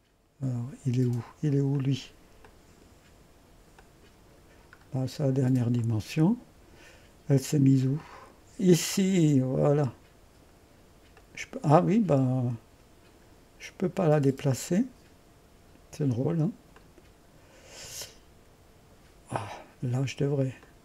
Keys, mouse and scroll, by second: 1.8-4.8 drag, 5.9 click, 8.0 click, 9.9-11.0 drag, 11.3-12.1 drag, 16.8 click, 20.7-20.8 drag.